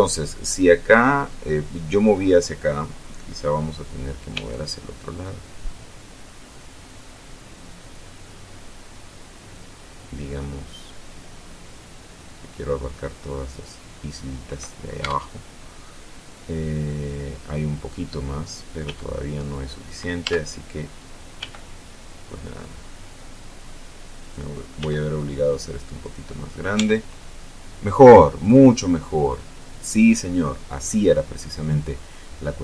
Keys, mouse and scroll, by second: 0.8 scroll down 1, 1.1 middle click, 4.3 g, 13.6 click, 14.9 Tab, 18.8 g, 20.2 Tab, 21.3 g, 24.1 click, 24.7 s, 25.9 click, 26.7 Tab, 28.7-29.1 scroll up 1, 29.2 scroll down 1.